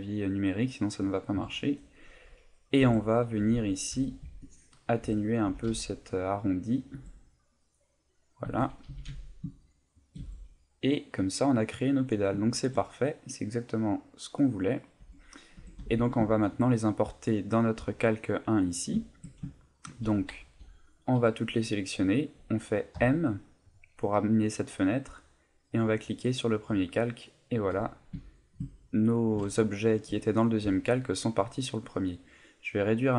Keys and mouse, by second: 1.3 KP_7, 2.8 Tab, 3.9 z, 4.2 b, 6.8 click, 6.9 Tab, 8.4 Tab, 8.9 s, 10.0 shift+click, 10.2 Tab, 10.6 middle click, 12.4 shift+middle click, 12.8 middle click, 15.0 Tab, 15.6 Tab, 15.8 a, 16.2 shift+middle click, 17.7 click, 18.6 click, 19.1 shift+middle click, 19.5 ctrl+middle click, 20.5 a, 21.3 middle click, 22.9 m, 27.7 click, 28.3 shift+middle click, 28.7 ctrl+middle click, 29.6 shift+middle click, 30.5 middle click.